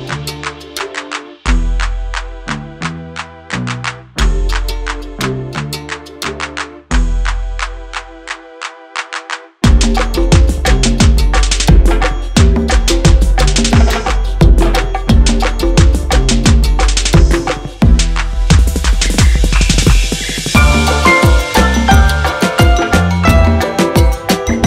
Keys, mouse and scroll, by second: 1.4 F9, 4.7 F9, 5.6 click, 7.2 click, 7.3 double click, 8.4 click, 9.6 double click, 10.6 click, 14.8 click, 16.2 click, 16.3 double click, 17.4 click, 18.6 double click, 19.1 scroll up 1, 20.0 scroll down 1, 21.1 click, 21.8 F4, 23.1 F9, 24.4 click.